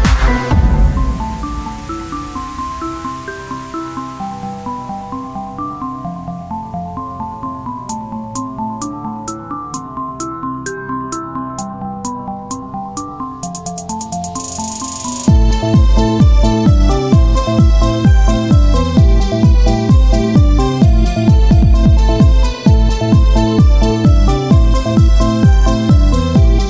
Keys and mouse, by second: 0.8-1.9 right drag, 0.9-6.3 drag, 6.3 Tab, 6.8 Tab, 9.6-11.4 drag, 11.4 Tab, 13.2 KP_1.